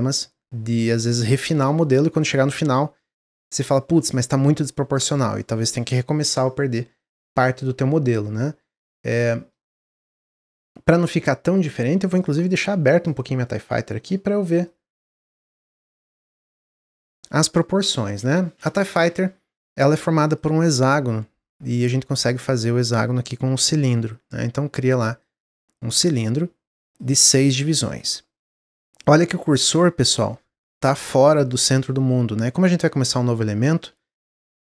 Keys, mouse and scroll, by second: 17.9 click, 20.1-23.2 drag, 26.7-29.0 drag, 29.0-33.0 middle drag, 34.0 x.